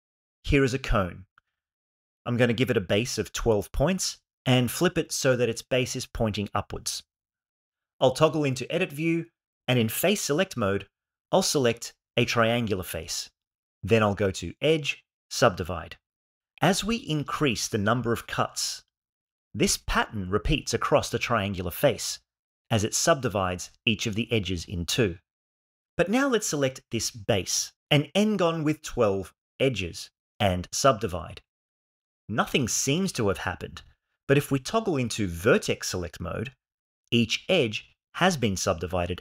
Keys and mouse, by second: 1.7-3.0 drag, 4.4 r, 4.7 x, 5.9 1, 6.2 8, 6.4 0, 6.8 shift+middle click, 9.4 Tab, 10.8 3, 12.9 click, 15.0-16.3 drag, 18.7 click, 19.9 click, 20.9 click, 21.7 click, 22.3 click, 26.2 click, 29.2 ctrl+e, 34.8 1.